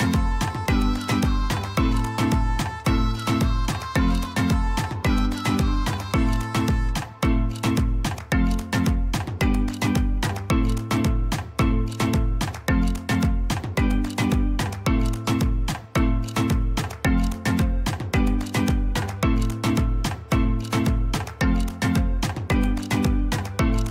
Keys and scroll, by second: 5.1 \, 7.5 l, 21.7 \.